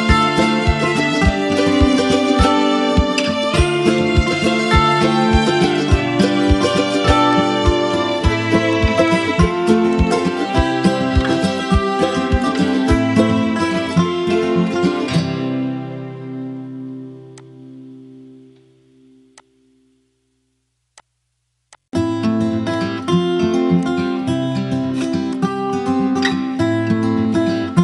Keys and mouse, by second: 4.0 click, 5.8 ctrl+j, 7.0-11.6 drag, 18.4 b, 19.0-19.6 click, 20.2 ctrl+z, 20.7 click, 22.7 ctrl+z, 23.5-24.1 click, 24.5 ctrl+z, 25.0 click, 25.8 Delete.